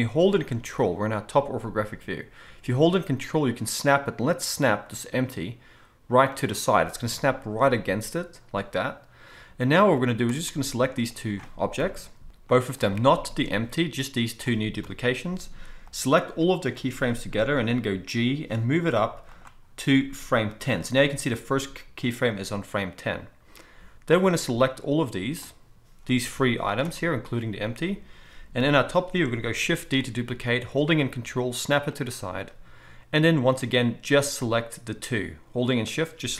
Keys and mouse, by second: 6.4-11.0 ctrl+middle drag, 11.0 shift+drag, 11.2-12.5 middle drag, 11.8 KP_7, 12.5-19.4 drag, 14.8 KP_7, 18.1 g, 19.4-24.1 middle drag, 24.1-32.0 drag, 26.2 g, 28.6 KP_7, 29.9 shift+d, 32.0-34.3 ctrl+middle drag, 34.3-35.1 drag, 35.1-36.3 shift+middle drag.